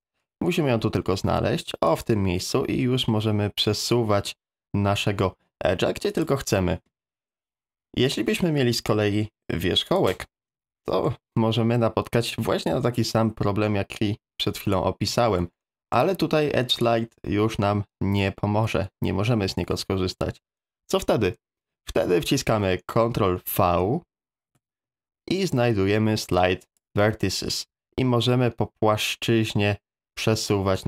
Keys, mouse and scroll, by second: 9.6 1, 10.8 middle click, 12.7-14.7 drag, 15.3 ctrl+z, 15.6 middle click, 16.8-19.3 right drag, 24.5 ctrl+v.